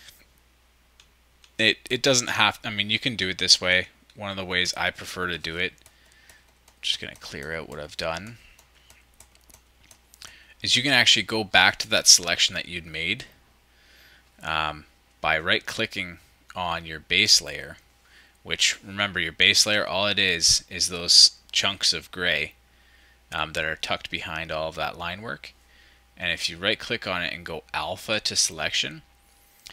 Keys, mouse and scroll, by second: 0.5 scroll down 1, 0.9-2.2 scroll up 1, 0.9 shift+=, 3.8 -, 5.2-6.2 ctrl+drag.